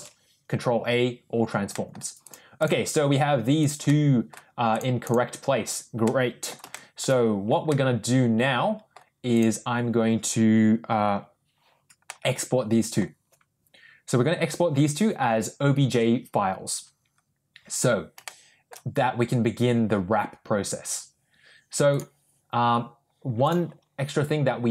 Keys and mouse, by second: 1.6 ctrl+middle drag, 2.1 ctrl+click, 3.5 ctrl+click, 3.8-4.2 ctrl+middle drag, 5.9-6.4 middle drag, 6.6 shift+middle drag, 7.6-8.8 middle drag, 9.2 click, 12.0-12.9 middle drag, 18.1 shift+middle click.